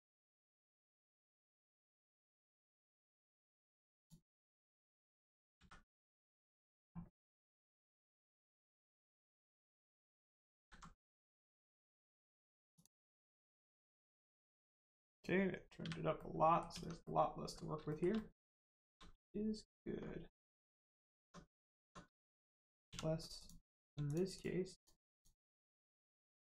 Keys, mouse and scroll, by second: 1.2 click, 5.5 x, 6.2 click, 8.2 middle click, 10.5 alt+z, 10.9 middle click, 12.0 Tab, 12.7 click, 13.2 scroll down 1, 13.4 middle click, 14.0 click, 14.3 middle click, 16.6 Tab, 17.0 middle click, 17.8 shift+middle click, 18.1 middle click, 18.2 middle click, 18.6 shift+middle click, 19.9 scroll up 1, 20.4 middle click, 20.8-21.1 scroll up 1, 21.2 Tab, 22.0 click, 22.4 shift+middle click, 22.8 1, 23.3 click, 24.0 shift+click, 24.3 shift+click, 24.7 shift+click, 25.1 shift+click, 25.6 shift+click.